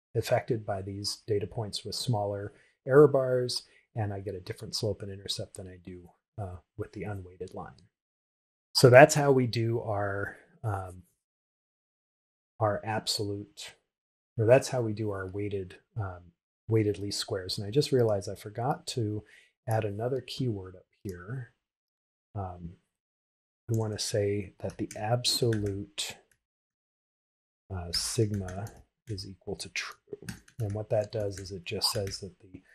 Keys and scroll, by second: 27.4 shift+-, 29.7 shift+t.